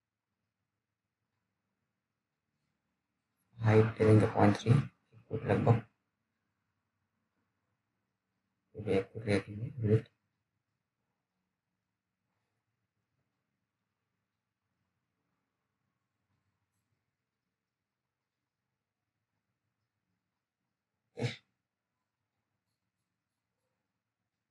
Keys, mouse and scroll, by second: 0.6 alt+middle click, 2.3 click, 10.6 click, 12.9 BackSpace, 17.1 t, 18.3 right click, 18.7 click, 19.4 t, 20.1 scroll down 1, 22.2-23.1 scroll up 1, 23.1 click, 23.4-24.5 scroll up 1.